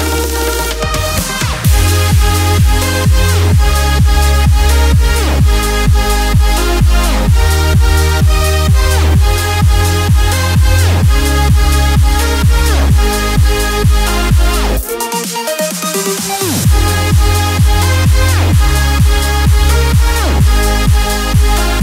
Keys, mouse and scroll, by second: 2.3-9.4 alt+shift+drag, 9.8 alt+scroll up 1, 10.7 alt+scroll up 1, 12.1 t, 12.8-17.6 drag, 18.3 t, 19.1-21.8 drag.